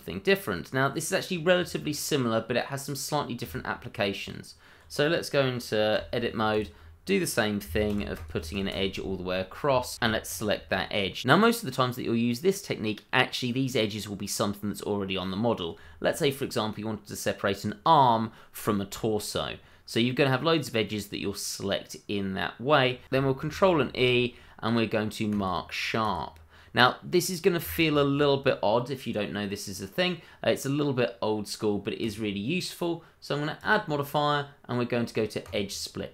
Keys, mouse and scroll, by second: 1.3 scroll up 1, 1.6 middle click, 3.4 Tab, 5.9 k, 6.5 click, 8.0 c, 8.1 click, 10.2 alt+click, 10.3 click, 10.7 middle click, 12.2 scroll down 1, 12.8 middle click, 19.3-19.7 scroll up 1, 19.7 middle click, 23.5 ctrl+e, 25.3 click, 27.6 Tab, 32.0 click.